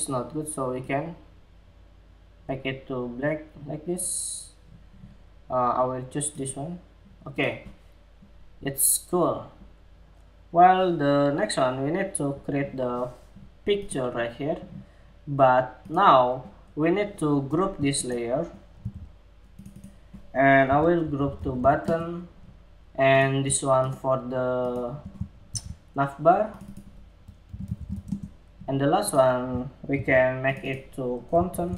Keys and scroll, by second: 18.3 super+g, 25.0 super+g, 29.5 super+g, 30.0 super+g.